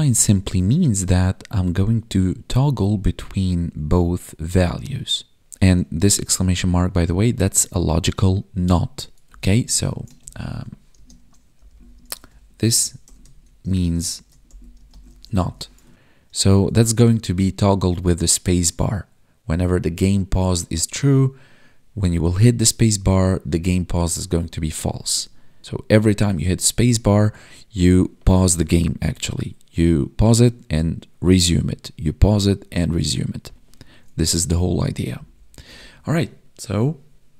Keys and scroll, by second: 5.9 Left, 9.2 Right, 10.1 ctrl+Right, 10.9 space, 11.9 space, 13.6 space, 14.7 space, 15.9 ctrl+s, 27.2 Down, 27.4 space, 29.1 Right, 29.9 space, 30.9 Down, 31.5 Left, 31.6 space, 31.7 Up, 31.8 Left, 31.9 Up, 32.6 space, 32.9 Left, 33.0 Up, 33.1 Left, 33.3 Up, 33.4 Left, 33.5 Up, 33.6 Left, 33.7 space, 33.7 Left, 34.7 space, 35.0 Up, 35.1 Left, 35.5 Up, 35.6 Right.